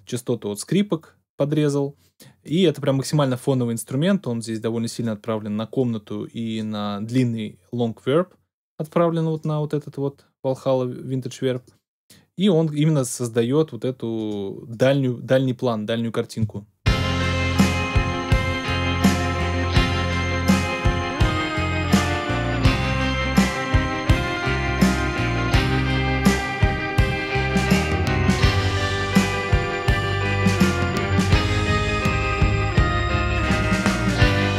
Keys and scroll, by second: 16.3 space.